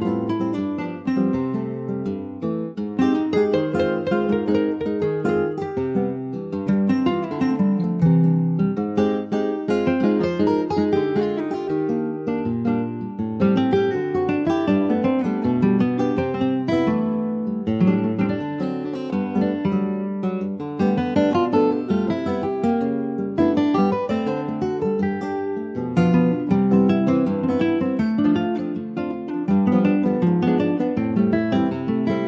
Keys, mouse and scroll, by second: 0.0 2, 0.8 click, 1.0 Tab, 2.2 click, 3.5 click, 4.2-7.1 middle drag, 7.1 scroll down 2, 7.3 alt+z, 7.6 alt+middle click, 8.5-8.9 scroll down 2, 8.9 shift+middle click, 9.3-10.5 drag, 10.5 scroll up 2, 11.2 f, 11.5 click, 12.5 middle click, 13.1 alt+z, 13.5 middle click, 13.9-14.2 scroll down 3, 14.2 shift+middle click, 15.2-16.0 shift+scroll up 4, 15.7 shift+middle click, 16.0 middle click, 16.4-17.2 scroll up 1, 17.2-18.3 drag, 18.3 shift+middle click, 18.8-19.8 shift+scroll up 6, 19.2 middle click, 19.8 shift+middle click, 20.5-20.8 shift+scroll up 2, 20.8 Tab, 21.1 click, 21.5 middle click, 22.0 Tab, 22.4-24.0 shift+middle drag, 24.0 Tab, 24.9 click, 25.8 Tab, 26.2 2, 26.5 click, 27.2 alt+shift+click, 28.4 alt+shift+click, 28.9 alt+shift+click, 30.3 g.